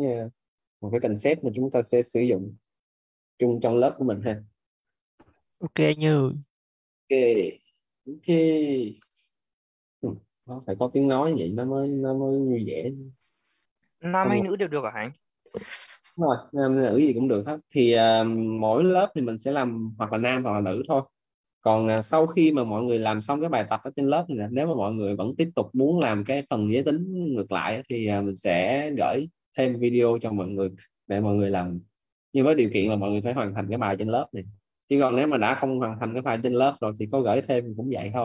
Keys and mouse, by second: 11.1 right click, 33.7 middle click.